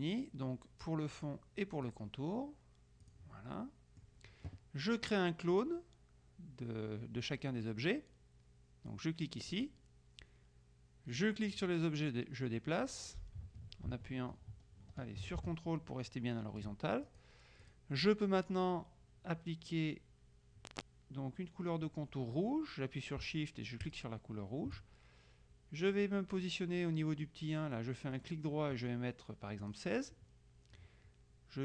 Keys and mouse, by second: 1.3 click, 2.0 click, 3.1 click, 3.7 right click, 9.6 click, 11.3-17.2 drag, 23.9 shift+click, 28.3 right click, 29.7 click.